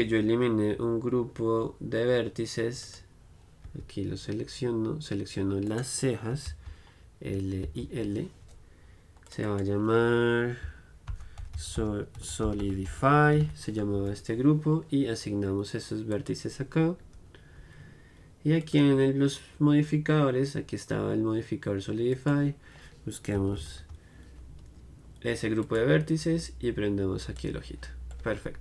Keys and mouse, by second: 2.9-4.8 right drag, 4.0 Tab, 5.8-7.8 right drag, 6.6 l, 7.8 l, 9.5-11.5 right drag, 16.2 right click, 17.3 Tab, 18.7-20.3 drag, 22.2-24.1 drag, 27.5 click, 28.2 middle click.